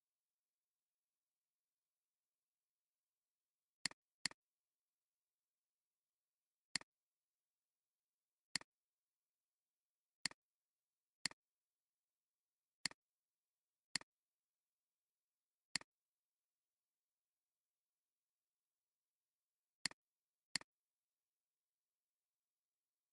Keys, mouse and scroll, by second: 4.1 space, 4.2 double click, 4.5 space, 6.4 space, 8.5 alt+shift+click, 9.9 alt+scroll down 2, 10.1 space, 10.7 space, 17.1 Delete.